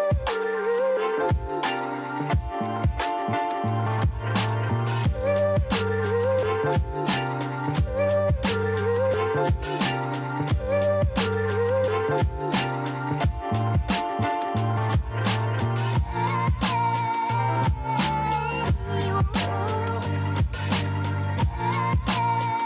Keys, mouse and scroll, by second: 0.9 scroll down 1, 2.8-3.3 scroll up 2, 3.3 scroll down 4, 4.3-5.5 scroll up 5, 5.5-6.4 scroll down 5, 7.1 drag, 8.2 shift+a, 11.1 click, 12.7 shift+a, 16.8 r, 21.0-22.6 drag.